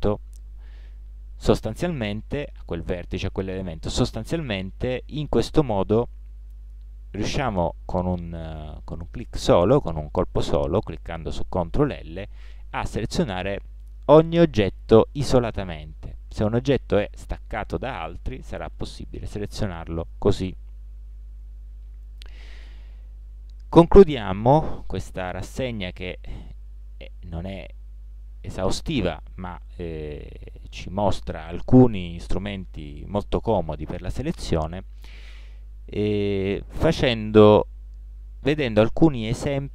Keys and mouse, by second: 7.3 ctrl+l, 11.9 ctrl+l, 13.1 middle click, 15.1-19.2 middle drag, 19.2 ctrl+l, 19.9-22.4 middle drag, 25.4 a, 26.1-26.9 middle drag, 28.3 middle click.